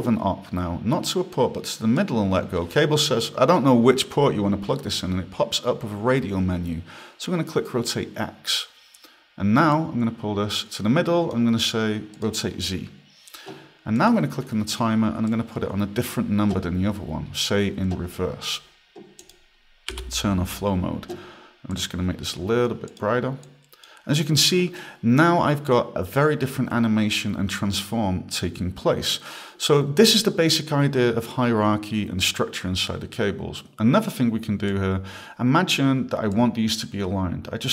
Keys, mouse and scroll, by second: 8.5 click, 9.7 click, 12.1 click, 14.0 click, 15.3 click, 19.2 click, 19.9 f, 21.7 click, 22.9 click, 27.8 click, 34.7 click, 36.3 click.